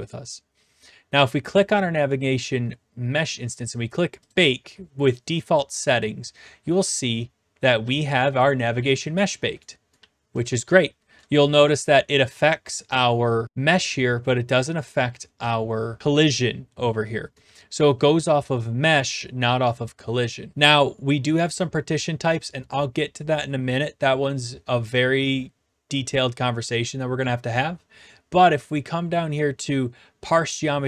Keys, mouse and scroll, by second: 1.6 click, 4.3-5.4 drag, 6.4-12.4 typing, 9.6 right click, 11.2 right click, 12.7 right click, 17.3-18.2 typing, 18.0-19.1 right drag.